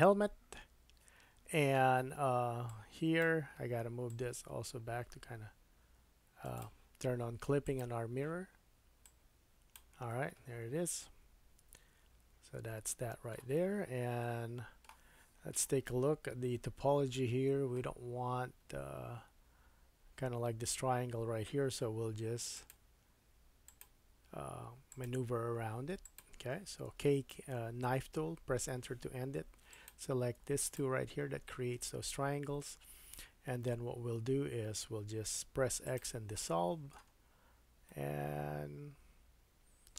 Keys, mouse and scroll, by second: 1.8 Tab, 2.7-6.6 drag, 7.7 click, 7.8-9.0 middle drag, 9.0-11.7 drag, 10.1 middle click, 11.7 middle click, 13.6 scroll down 3, 14.2 middle click, 14.5-29.9 shift+super+drag, 15.3-16.3 scroll up 2, 16.3 KP_3, 17.4-18.4 scroll up 2, 21.8 k, 29.4 2, 29.9 middle click, 30.6 shift+click, 30.8-39.9 shift+middle drag, 35.3 x, 37.2-37.9 scroll down 3.